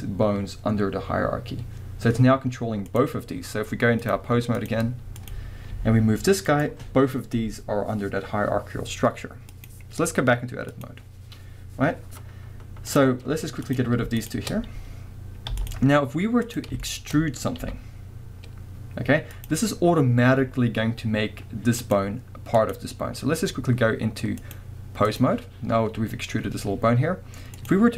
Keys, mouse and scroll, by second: 2.8 click, 4.0-5.3 drag, 5.7 g, 6.6 right click, 9.5-13.0 drag, 11.5-12.9 scroll down 2, 13.3 scroll up 1, 13.6 click, 14.2 shift+click, 14.5 scroll down 1, 15.5 x, 15.9 scroll up 1, 16.4 click, 16.8-19.5 shift+middle drag, 17.6 e, 19.5 click, 19.7 scroll up 1, 20.4 scroll down 1, 21.8 click, 22.6 click, 24.4-27.7 drag.